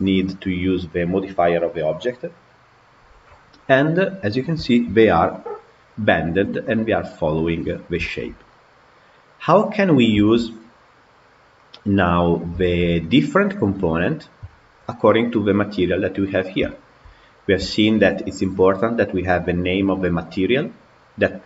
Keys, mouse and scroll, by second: 4.0 scroll up 1, 4.4-6.3 shift+middle drag, 6.3-7.9 scroll up 1, 7.9 scroll up 1, 7.9-9.8 shift+middle drag, 9.8 scroll down 2, 10.0-10.8 shift+middle drag, 10.8 scroll up 1, 11.4-12.1 middle drag, 12.1-12.5 scroll down 2, 12.5-15.8 shift+middle drag, 16.5-17.2 shift+middle drag, 17.2 scroll up 3, 17.5-18.2 shift+middle drag, 18.2 click, 19.7 click.